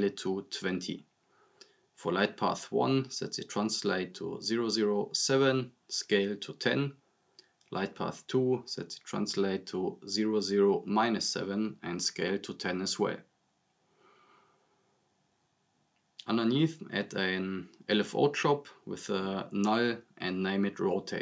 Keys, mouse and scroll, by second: 2.5 click, 5.9 click, 8.3 click, 12.3 click, 15.1 click, 18.7 right click, 19.1-20.2 typing, 20.3 click.